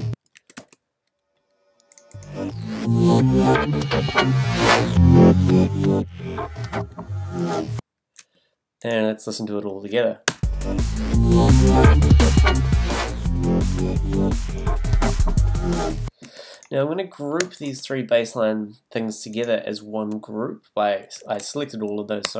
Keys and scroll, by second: 0.4 space, 10.2 space, 16.2 space.